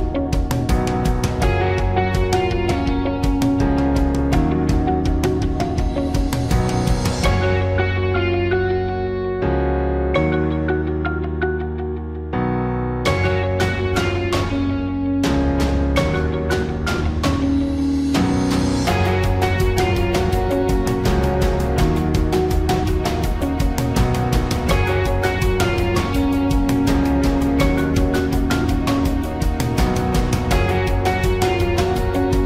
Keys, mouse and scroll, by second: 12.5-14.3 ctrl+drag, 14.3 ctrl+t, 19.6 Return, 22.3 ctrl+j.